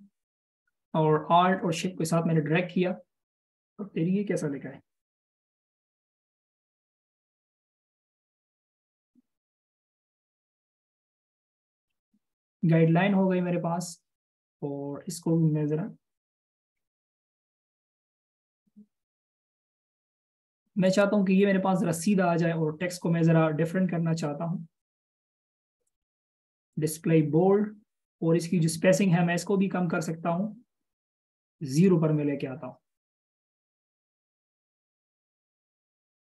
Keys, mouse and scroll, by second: 1.8 alt+shift+click, 5.0 ctrl+a, 6.8-7.2 typing, 10.3-11.8 typing.